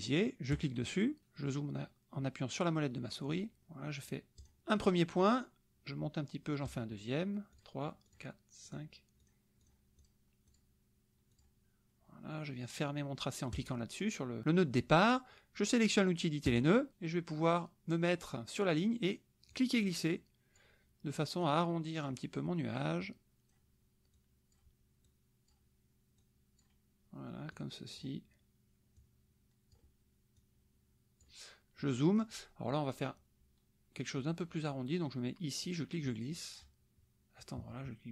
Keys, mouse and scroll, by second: 0.5 click, 1.3 middle click, 3.3 middle click, 4.4 click, 6.6 click, 6.9-7.5 scroll up 1, 7.5 click, 8.1 click, 8.7 click, 9.2 click, 10.0 click, 10.5 click, 11.3 click, 13.5 click, 16.4 click, 19.5-20.7 drag, 21.4 click, 23.0 click, 24.1 click, 25.1 click, 26.2 click, 27.5 click, 29.0 click, 30.3-31.4 drag, 31.8 middle click, 32.3 middle click, 35.6-36.7 drag, 37.4-38.1 drag.